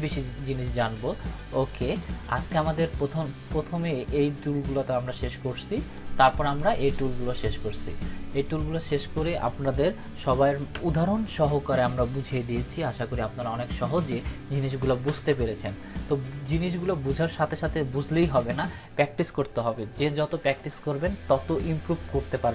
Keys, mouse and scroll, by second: 2.7-3.7 drag, 14.7 ctrl+-, 15.0 ctrl+=.